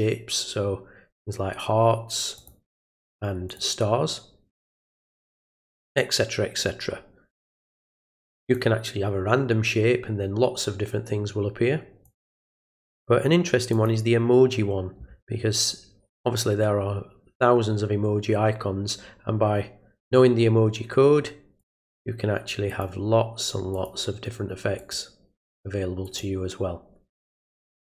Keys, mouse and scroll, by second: 1.1 click, 2.4 click, 3.5 click, 4.9 click, 8.4 click, 12.0 click, 13.7 click, 21.6 click, 22.7 click, 23.7 click, 24.8 click, 26.0 click, 27.8 click.